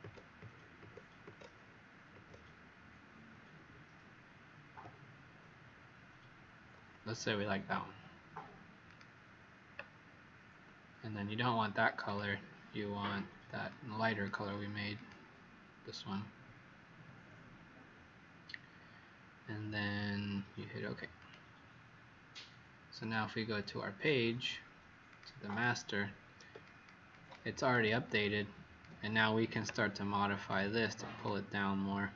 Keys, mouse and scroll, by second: 0.4 Up, 0.7 Up, 2.1 Up, 4.7 Down, 8.8 click, 25.5 click, 26.6 click, 27.1 click, 27.6 click, 28.0 click, 30.3 click.